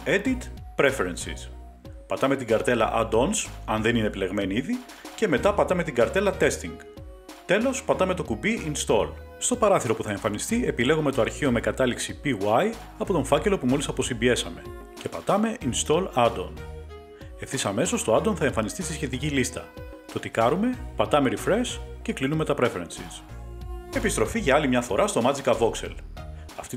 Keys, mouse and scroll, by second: 0.8 click, 2.0 click, 6.6 click, 8.9 click, 11.0 click, 12.5 click, 12.6 click, 15.5 click, 18.9 click, 21.5 click, 23.5 click, 23.9 Page_Up.